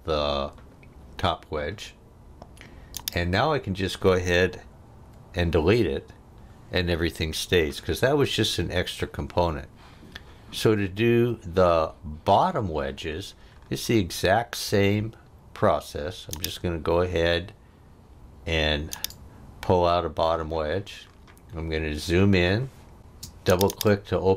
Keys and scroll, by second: 5.0 Delete, 23.0 space.